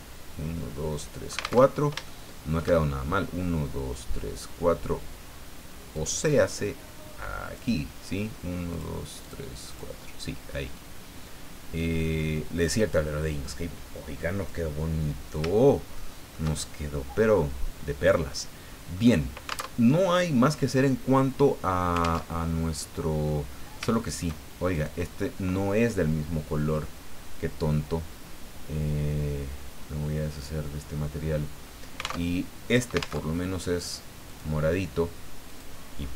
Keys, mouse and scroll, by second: 1.6 alt+Tab, 2.0 shift+middle click, 5.9-7.7 drag, 8.7 click, 9.2 click, 9.7 click, 10.7-14.6 drag, 15.9 shift+middle click, 16.6-16.9 shift+scroll down 1, 17.0-18.4 middle drag, 18.6 scroll down 1, 18.9 middle click, 19.7 alt+Tab, 22.2 alt+Tab, 22.8 middle click, 23.8 shift+scroll up 2, 23.9 shift+middle click, 24.7 shift+right click, 30.3 click, 32.2 alt+Tab, 33.2 alt+Tab, 34.3 click, 35.5 click.